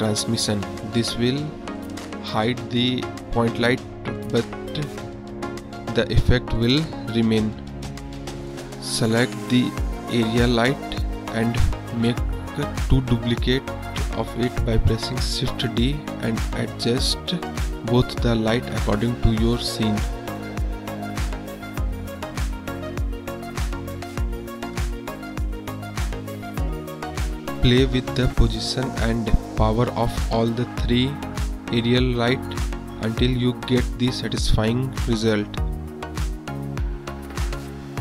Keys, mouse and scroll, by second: 0.2 click, 1.2 click, 2.2 click, 6.4 middle drag, 8.5 KP_1, 9.5 KP_7, 10.3 click, 11.2 shift+d, 15.7 shift+d, 18.4 KP_1, 20.7 g, 22.7 click, 26.1 drag, 26.4 drag, 27.0 r, 30.1-30.8 drag, 31.8 click, 32.4 r, 33.5 click, 34.3 r, 35.1-36.1 drag, 36.9-37.3 drag.